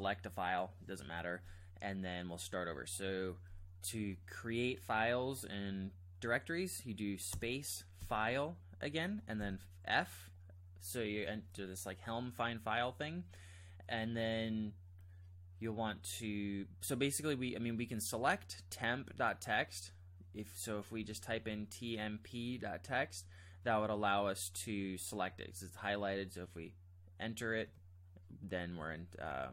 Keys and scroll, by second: 7.3 space, 8.2 f, 9.4 f, 20.7-22.3 typing, 27.6 Return.